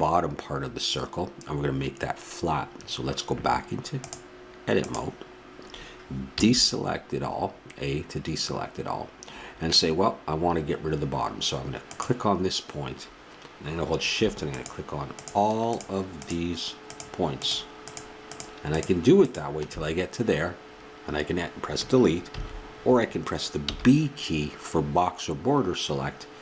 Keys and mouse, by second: 3.9-5.6 drag, 6.4 a, 8.8-13.6 drag, 14.5-21.0 drag, 22.3 a.